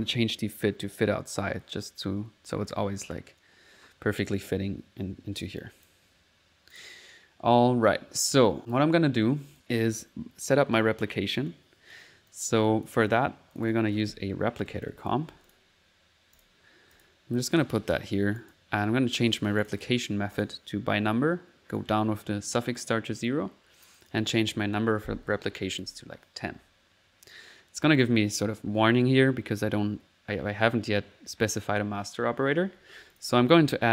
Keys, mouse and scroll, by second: 0.9 click, 1.1-1.8 typing, 1.4 click, 1.9 middle click, 5.6 click, 6.1 click, 10.8 click, 11.5 right click, 12.3 click, 13.1 click, 13.2-15.3 typing, 13.5 click, 15.4 click, 16.4 click, 17.0 click, 17.4 click, 18.4 click, 19.6 click, 20.3 click, 21.8 click, 23.9 click, 31.8 middle click, 33.1 click, 33.3-33.9 typing.